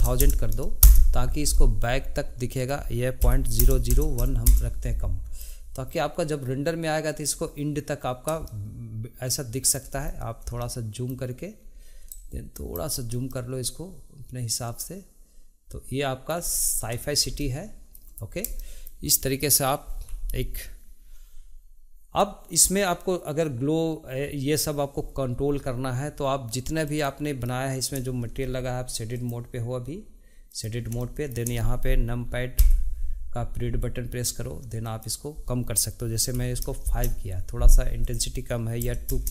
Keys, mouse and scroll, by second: 0.3 KP_0, 2.7-4.0 drag, 4.0 KP_0, 5.5-8.5 shift+middle drag, 8.7-10.2 shift+middle drag, 10.2-10.7 scroll down 1, 10.7-12.2 shift+middle drag, 12.2 ctrl+shift+right click, 13.4-16.4 ctrl+shift+middle drag, 16.8-21.9 middle drag, 27.0 click, 29.3-31.1 drag, 31.1-32.7 shift+middle drag, 32.7 KP_Decimal, 35.0-38.1 drag, 38.2-39.3 drag.